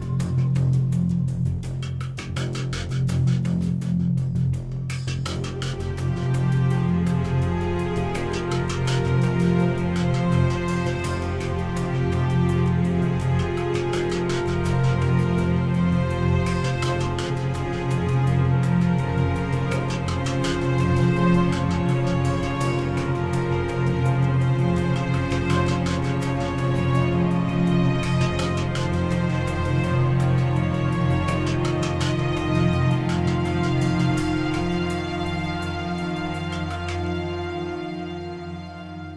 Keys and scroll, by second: 7.0 ctrl+t.